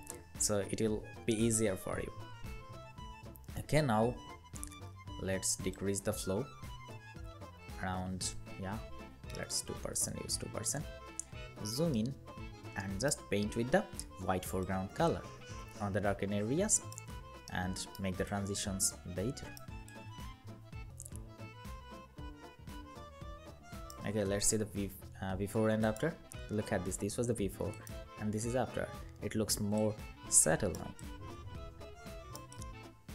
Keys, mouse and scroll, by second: 9.1 2, 9.1 Return, 10.4 alt+scroll up 1, 11.7 alt+right click, 17.3 alt+right click.